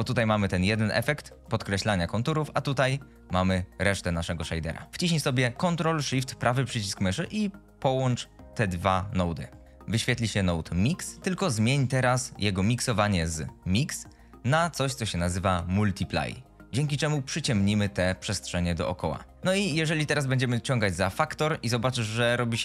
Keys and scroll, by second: 1.4 g.